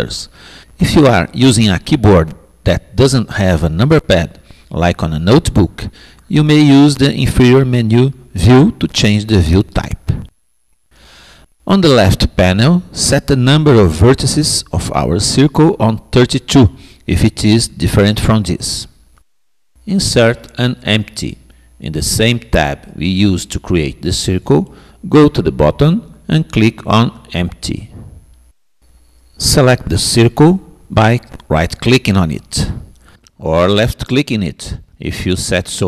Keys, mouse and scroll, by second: 22.4-27.9 middle drag, 27.9-29.8 drag, 33.4-34.9 drag.